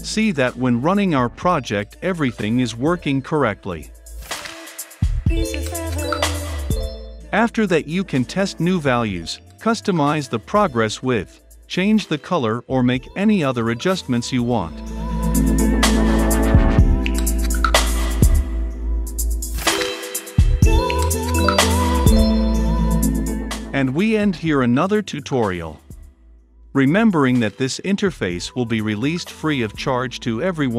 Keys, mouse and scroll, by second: 4.6 click, 6.5 click, 7.0-9.7 typing, 9.8 Down, 10.2 Return, 11.2 space, 16.1 F5, 16.1 click, 16.8 click, 18.2 click, 19.1 F5, 19.1 click, 19.6-22.0 drag, 22.0 x, 22.9 ctrl+v, 24.0 click, 24.6 Return, 25.3 ctrl+F5, 30.5 click.